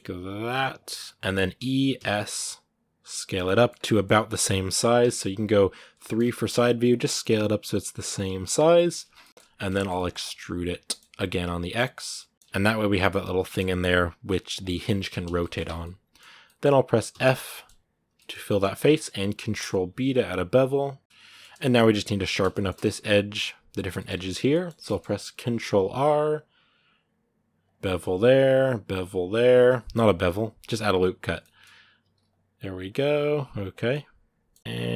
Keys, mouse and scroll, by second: 0.7 scroll down 2, 0.7 middle click, 1.1 scroll up 1, 1.4 e, 3.2 middle click, 3.5 scroll up 1, 3.7-4.8 middle drag, 4.8 KP_3, 5.8 shift+middle click, 5.9 shift+scroll up 2, 6.7 s, 8.4-9.0 scroll down 4, 8.5 middle click, 9.0 middle click, 9.1 scroll up 2, 9.5 shift+middle click, 10.1 e, 12.3 Tab, 13.2-15.4 middle drag, 15.4 Tab, 15.6 middle click, 16.4-16.9 scroll up 2, 16.9 f, 17.3-18.4 shift+middle drag, 18.4-19.2 scroll up 1, 19.2 ctrl+b, 21.0 middle click, 21.3 Tab, 22.3-23.9 shift+middle drag, 23.9 Tab, 24.3 middle click, 25.3 ctrl+r, 27.8 ctrl+r, 31.2 middle click, 31.4-31.8 scroll up 2, 31.8 ctrl+r, 32.9 ctrl+r, 33.7 middle click, 34.6 ctrl+r.